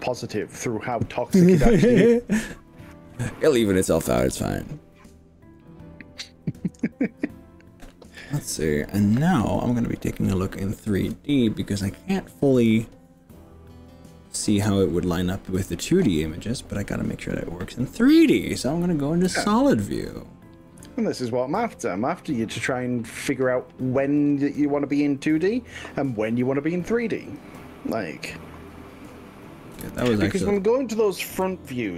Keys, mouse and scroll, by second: 1.1 middle click, 8.4 click, 18.4 z, 19.9-24.2 middle drag, 24.2-25.6 drag, 26.4 click, 27.3 g, 28.2 click, 28.4-29.6 middle drag, 29.8 ctrl+z, 30.2 middle click, 31.4 KP_3.